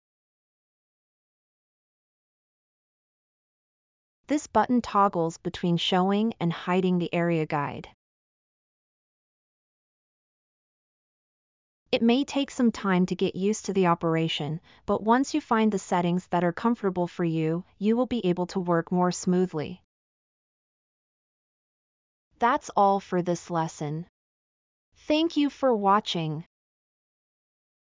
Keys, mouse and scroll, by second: 19.5 middle click, 19.6-20.0 scroll up 4, 19.7 middle click, 26.9 scroll down 1.